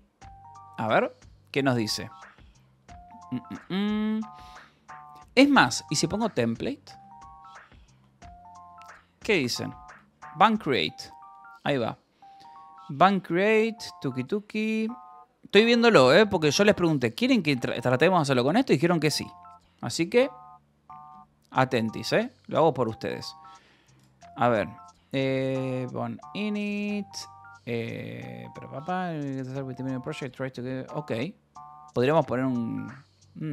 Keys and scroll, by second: 6.0-7.8 typing, 7.9 Down, 9.2 Up, 9.8 Return.